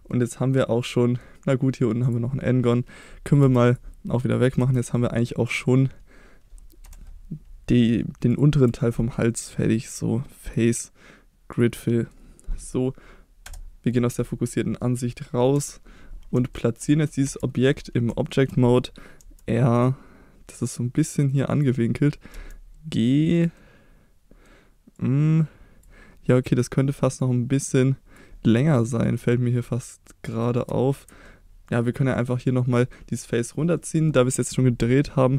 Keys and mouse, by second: 0.4 middle click, 2.0 click, 3.4 3, 3.7 click, 4.6 x, 6.8 2, 8.8 middle click, 10.5-11.6 drag, 11.8 middle click, 13.5 KP_Divide, 14.2 middle click, 15.6 KP_3, 16.5-16.9 shift+middle drag, 17.2 Tab, 18.3 shift+middle click, 19.2 r, 21.5 click, 23.4 drag, 23.6-24.5 middle drag, 25.0-25.8 drag, 27.2-28.2 drag, 28.8-30.4 middle drag, 30.7 Tab, 31.3-32.2 middle drag, 32.9 middle click, 33.8 middle click.